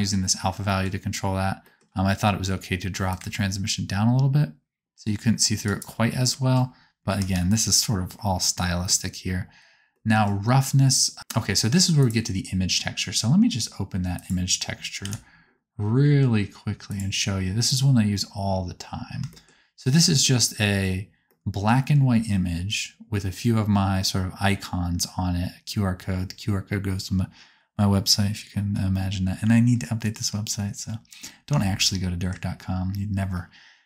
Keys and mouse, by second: 3.0-5.8 ctrl+drag, 7.1 KP_0, 11.9 click, 14.1-16.9 drag, 31.5-33.1 shift+middle drag.